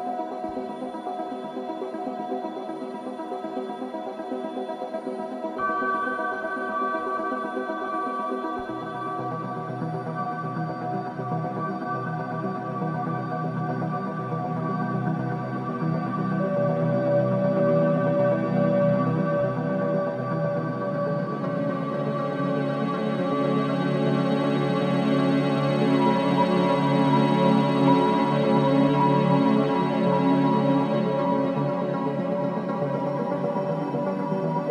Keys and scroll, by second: 15.9 2, 16.7 4, 23.5 2, 26.4 ].